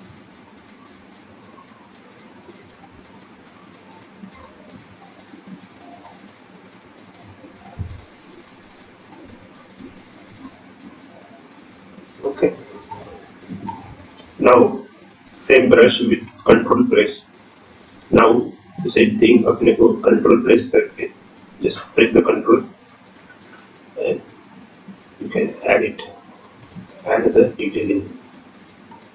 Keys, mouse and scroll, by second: 0.1 click, 1.0 click, 1.3 shift+click, 3.1-3.6 scroll down 8, 3.6-4.1 scroll up 10, 4.1 shift+middle click, 4.8 scroll up 1, 5.3 click, 5.8 click, 6.8 click, 8.5 shift+click, 8.6 shift+click, 8.9 shift+click, 10.1 click, 12.3 shift+click, 14.6 click, 14.7 shift+click, 15.5 click, 16.5 shift+click, 18.5 scroll down 2, 18.7-19.1 scroll down 9, 19.3-20.0 scroll up 9, 20.3 shift+middle click, 21.5-21.9 scroll up 1, 22.0 click, 26.9 click.